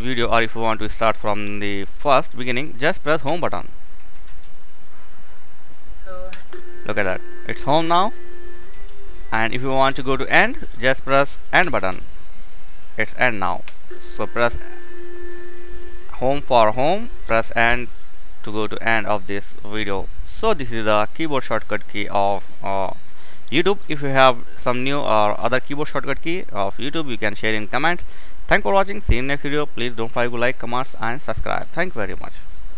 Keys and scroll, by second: 4.4 typing.